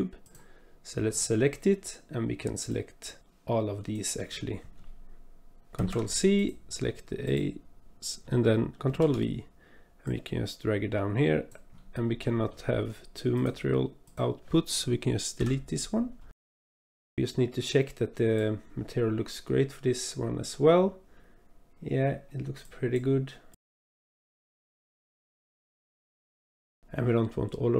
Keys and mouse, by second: 2.9 click, 3.3-4.0 drag, 5.7 ctrl+c, 7.2 click, 8.9 ctrl+v, 10.0-11.5 drag, 12.2 click, 13.3 click, 14.0 click, 15.4 Delete, 16.6 click, 16.8 click, 17.6-18.4 drag, 19.6 click, 22.8 drag, 23.6 click, 25.3 click, 26.8 ctrl+z.